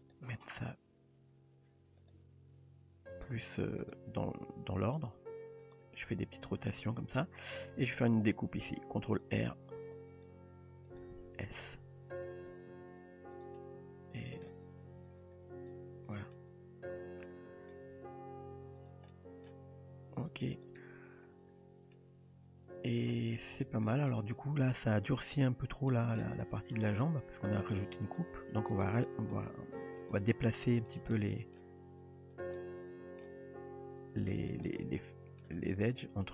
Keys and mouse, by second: 0.1 click, 0.5 r, 2.2 g, 3.9 drag, 4.2 g, 5.3 r, 9.6 ctrl+r, 11.4 d, 12.6 s, 13.6 middle click, 14.6 g, 15.8 Tab, 16.4-17.7 middle drag, 17.9 Tab, 19.1-19.5 middle drag, 20.1 g, 20.9 Tab, 21.9-23.0 middle drag, 23.9 shift+middle drag, 25.3 Tab, 25.9-26.2 middle drag, 26.4 drag, 26.8 middle click, 27.2 g, 28.1 click, 29.0 middle click, 29.7 g, 31.2-31.6 middle drag, 31.8 g, 32.6-33.2 middle drag, 33.4 g, 34.7-35.5 middle drag.